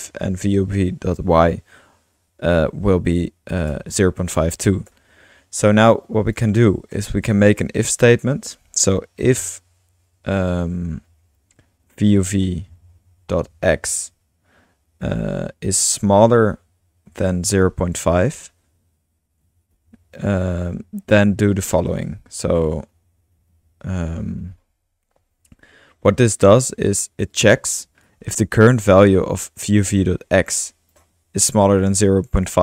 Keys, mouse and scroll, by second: 0.0 Return, 1.5 BackSpace, 6.3 click, 6.9 Return, 7.5 Return, 8.0 Up, 8.5-9.3 typing, 10.6-11.1 typing, 12.1-12.5 typing, 14.2-15.7 typing, 17.1-18.5 typing, 19.7 typing, 22.9 Return, 28.0 click, 28.4 typing, 29.0-31.0 drag, 31.7-32.6 drag.